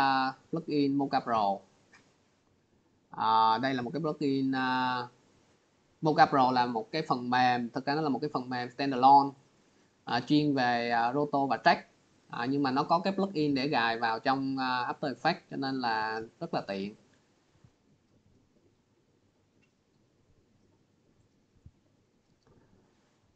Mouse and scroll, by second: 4.4 click, 5.3 click, 5.5 click, 6.9 click, 9.4 click, 9.5 click, 15.2 click, 16.7 click, 17.8 click.